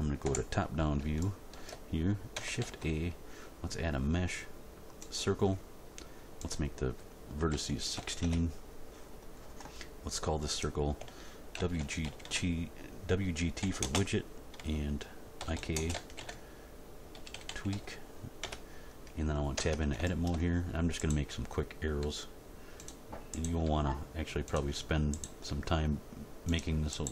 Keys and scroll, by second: 0.2 Home, 2.6 shift+a, 7.5 1, 8.0 6, 8.2 Return, 11.5 shift+w, 11.8 shift+g, 12.0 shift+t, 13.6 -, 13.8 space, 15.4-17.7 typing, 18.4 Return, 19.6 Tab, 22.0 e, 23.6 e, 25.4 e.